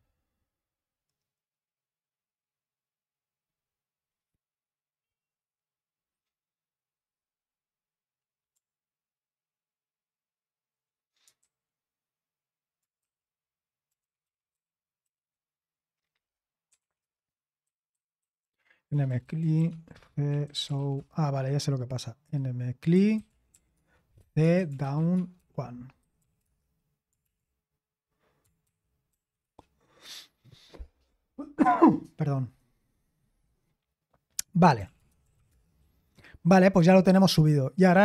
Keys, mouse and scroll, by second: 11.4 super+h, 13.0-15.0 typing, 16.4-27.2 typing, 28.4-29.9 typing, 34.6-35.9 typing.